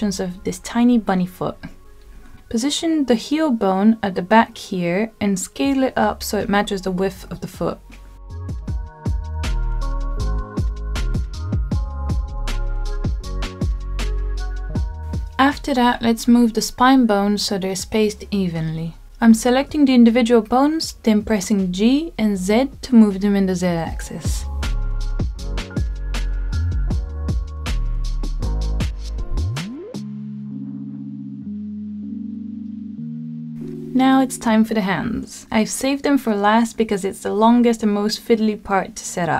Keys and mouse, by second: 0.7 click, 1.6 middle click, 3.0 g, 3.4 y, 4.7 click, 5.2-7.1 middle drag, 7.5 KP_1, 8.4 s, 11.2 click, 16.5 middle click, 17.5-18.5 middle drag, 19.4 middle click, 22.2 g, 22.8 z, 25.0 click, 25.4-26.0 middle drag, 27.7 g, 28.1 z, 30.9 click, 31.4-34.7 middle drag, 36.5 middle click, 37.7 shift+middle click.